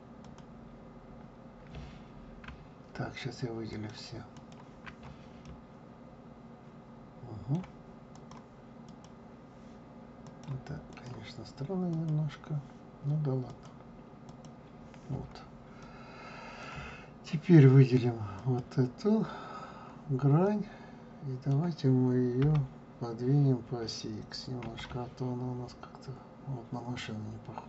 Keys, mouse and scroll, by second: 0.2 click, 3.7 shift+click, 4.3 shift+click, 5.4-8.1 middle drag, 8.1 click, 8.8 click, 10.2-12.0 drag, 13.5-15.8 drag, 15.8-18.3 middle drag, 18.3 click, 20.4-22.4 middle drag, 22.4 g.